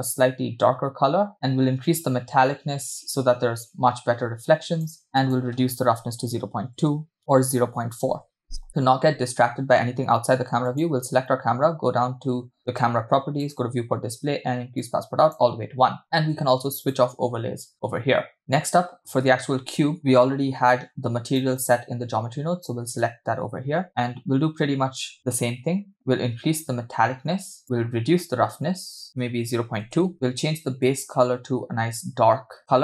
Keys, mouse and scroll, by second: 1.3-2.0 scroll down 3, 2.0-5.0 drag, 5.2-8.4 drag, 10.9 click, 13.7 click, 13.8-14.8 scroll down 1, 14.8 scroll down 1, 14.9 click, 17.0 click, 18.4 click, 20.0-21.9 drag, 23.9 scroll down 3, 25.9 scroll down 1, 26.0-30.0 drag, 30.1-31.9 scroll up 1.